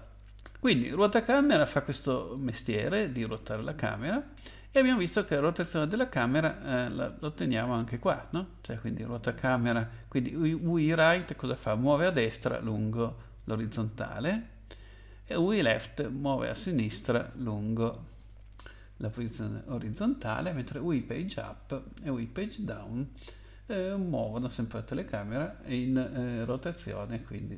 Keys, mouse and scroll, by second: 2.2 click, 3.0-4.5 scroll up 7, 5.0-5.4 scroll up 3, 6.7-7.9 scroll up 2, 8.0 scroll up 2, 11.9 click.